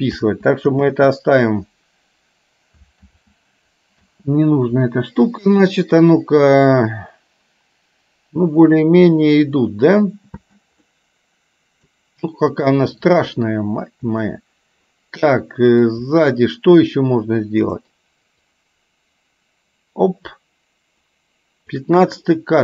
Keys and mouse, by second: 0.3 ctrl+z, 0.9 ctrl+z, 3.1 ctrl+z, 4.1 space, 10.6 space, 10.8-11.9 middle drag, 14.3-15.8 middle drag, 18.6-21.8 drag, 22.3-22.6 middle drag.